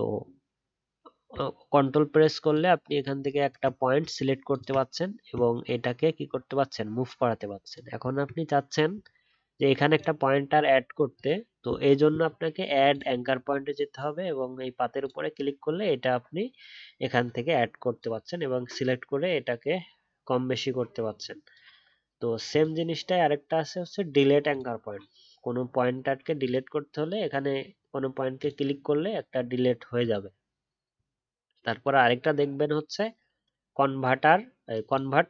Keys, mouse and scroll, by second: 2.5 ctrl+click, 4.5 ctrl+click.